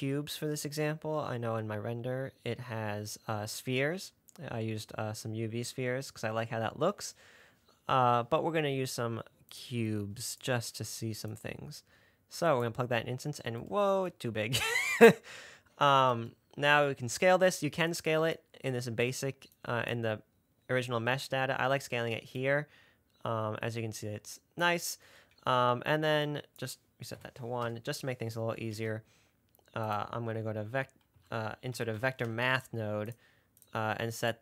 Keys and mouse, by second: 11.6-13.0 drag, 26.7-28.2 drag, 29.0 shift+a.